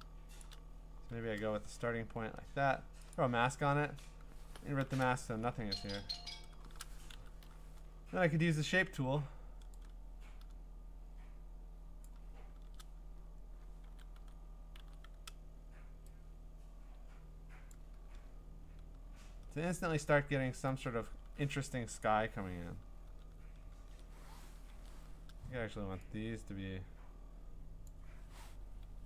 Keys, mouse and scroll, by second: 0.4 shift+click, 3.8 click, 4.5 click, 4.5 g, 4.8 ctrl+i, 5.7 g, 6.3 g, 7.1 u, 12.0-15.7 drag, 13.9-14.8 typing, 17.7 click, 18.3-20.2 scroll, 20.2-20.9 scroll, 22.0 click, 23.1 ctrl+i, 23.7 ctrl+i, 24.7 ctrl+u, 27.9 click.